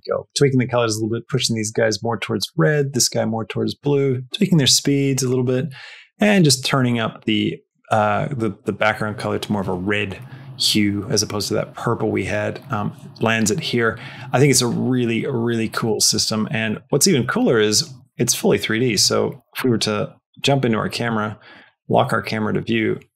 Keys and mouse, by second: 15.8 space, 16.7 middle click, 17.8 middle click, 19.3 KP_0, 19.5 KP_0, 20.0 KP_0, 20.8 q, 22.0-23.1 shift+middle drag.